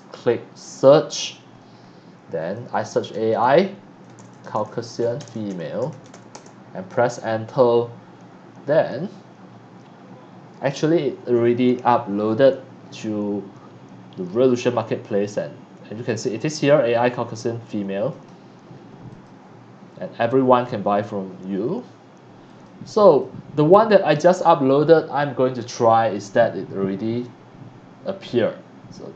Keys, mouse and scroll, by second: 2.8 shift+a, 4.0-6.6 typing, 8.6 middle click, 18.1 scroll up 1, 19.2 click, 22.4 click, 23.0 click.